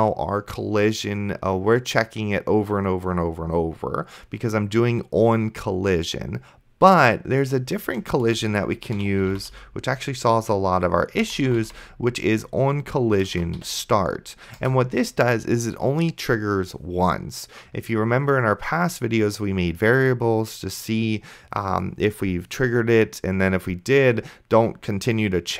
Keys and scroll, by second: 8.4 Return, 8.6-10.0 typing, 11.2-12.5 typing, 13.6 t, 14.6 Return.